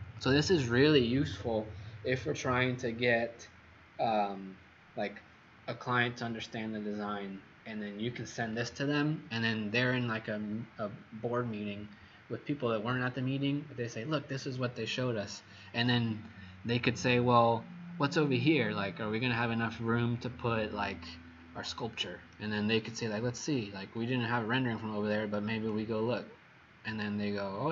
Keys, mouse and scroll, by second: 23.9-24.5 scroll up 11, 25.1 click, 26.3-26.9 scroll up 4, 26.9-27.3 scroll up 4.